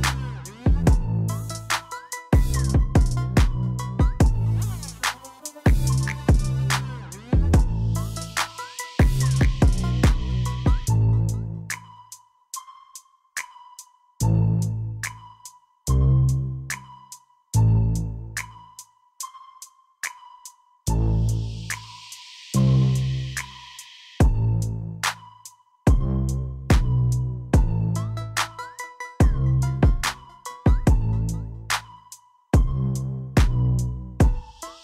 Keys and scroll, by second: 2.5 7, 6.7 shift+d, 7.0 x, 10.1 shift+d, 14.9 g, 16.6 shift+d, 17.0 y, 19.6 g, 19.8 y, 22.1 shift+d, 22.4 y, 26.2 g, 29.2 Tab, 31.8 g, 32.0 y, 34.5 shift+z.